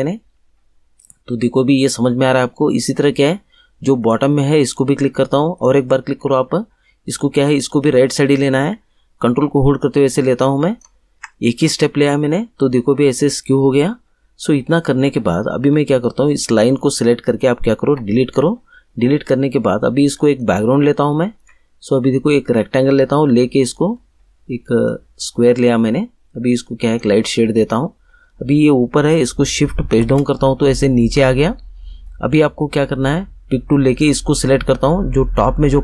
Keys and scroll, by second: 17.8 Delete, 29.9 shift+Page_Down.